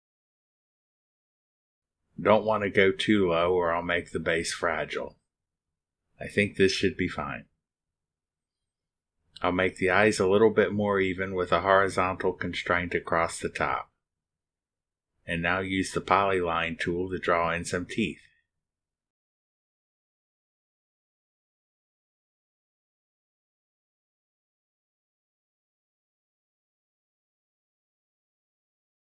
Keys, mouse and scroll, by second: 1.2 click, 3.8 click, 4.7 right click, 10.2 click, 11.6 click, 14.0 click, 14.8 click, 16.1 click, 16.8 click, 17.6 click, 19.3 right click, 20.3 click, 21.6 click, 22.3 click, 23.1 right click, 23.8 click, 24.5 click, 25.0 click, 25.4 right click, 26.7 click, 27.3 click, 28.2 click, 28.6 right click.